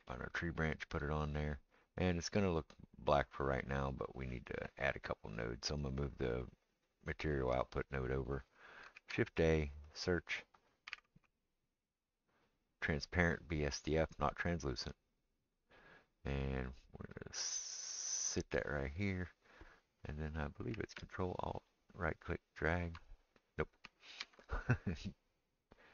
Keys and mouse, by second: 0.0 click, 0.0-6.7 right drag, 5.8-18.5 drag, 5.8 middle click, 9.0 shift+a, 9.1-12.4 middle drag, 9.1-12.4 right drag, 17.6-21.1 middle drag, 17.6-25.9 right drag, 24.2 ctrl+z.